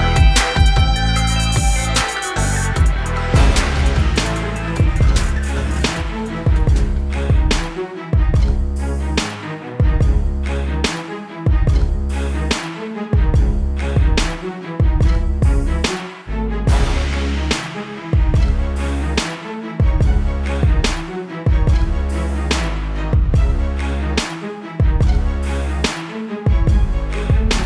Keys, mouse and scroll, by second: 1.7 click, 7.5 typing, 8.3 click, 21.1 ctrl+z, 22.1 click, 22.3-22.7 scroll up 1, 25.2 ctrl+t, 26.3 click, 27.0 ctrl+-.